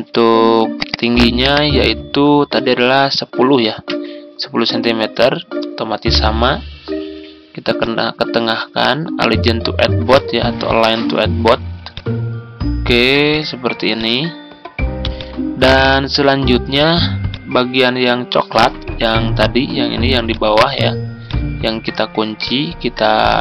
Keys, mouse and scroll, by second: 2.5 1, 3.8 0, 4.6 Return, 7.6-23.4 drag.